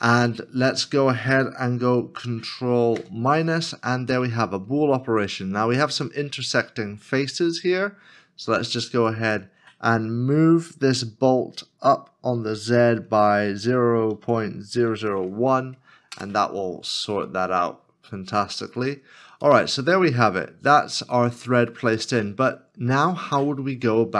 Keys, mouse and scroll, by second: 3.0 ctrl+-, 4.2 middle click, 6.7 scroll up 1, 7.5 scroll up 1, 7.5 middle click, 10.8 g, 12.4 z, 14.1 ., 14.7 0, 14.9 0, 16.1 Return, 17.3 middle click, 18.7 scroll down 1, 19.7 middle click.